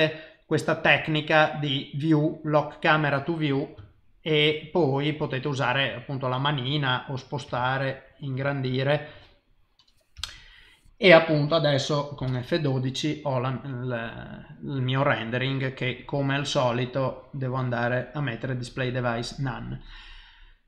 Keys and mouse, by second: 1.3 click, 2.3 click, 3.9 shift+middle click, 5.5 click, 6.7 shift+middle click, 7.6 ctrl+middle click, 8.5 shift+middle click, 10.2 n, 16.0 click, 17.0 click.